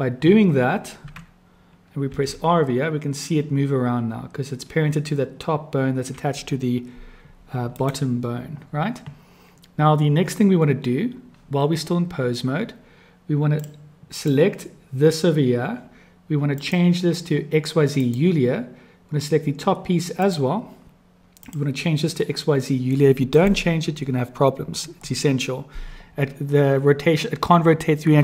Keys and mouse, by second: 2.1 r, 13.5 click, 16.5-18.2 drag, 21.5-23.5 drag.